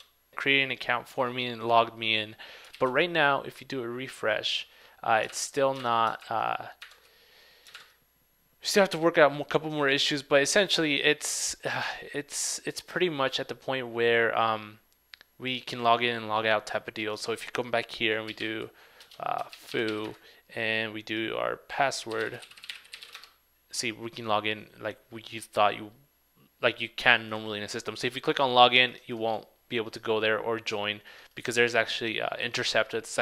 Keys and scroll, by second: 2.8 super+r, 5.4 super+Tab.